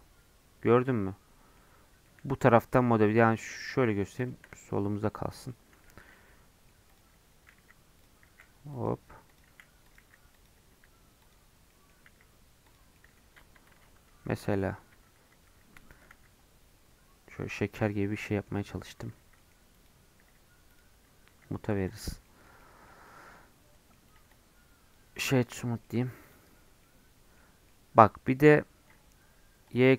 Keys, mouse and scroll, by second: 0.7-5.8 middle drag, 5.8 3, 6.1 middle click, 6.9 click, 7.5-10.7 typing, 11.5 scroll down 1, 11.7 middle click, 12.0 s, 12.9 middle click, 13.7 Tab, 14.1 ctrl+2, 14.9 Tab, 15.2 2, 15.8 alt+click, 16.1 s, 18.2-19.2 scroll up 2, 18.2 middle click, 19.2 3, 19.3 middle click, 19.7 click, 20.2 e, 21.3 s, 22.0 Tab, 22.2 middle click, 22.5 scroll down 2, 22.6 middle click, 22.9 scroll up 1, 23.0-24.0 middle drag, 24.0-25.8 right drag, 25.8 middle click, 26.2 click, 26.4 Tab, 26.8-29.7 middle drag, 29.7-29.9 drag.